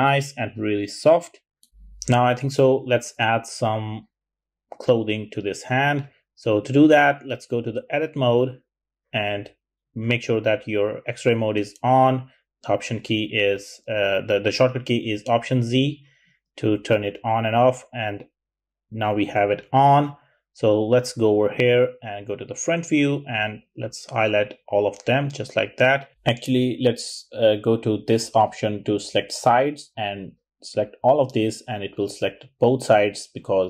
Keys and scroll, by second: 10.5 typing, 11.4 alt+z, 12.0 alt+z, 14.3 alt+z, 16.2 alt+z, 21.9 `.